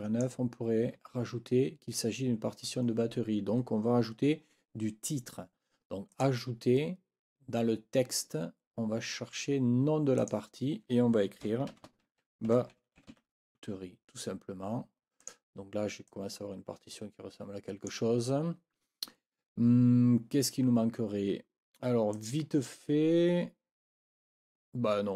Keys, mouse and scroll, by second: 6.1 click, 10.2 click, 11.4-13.6 typing, 15.2 scroll up 1, 16.1-17.5 scroll up 1.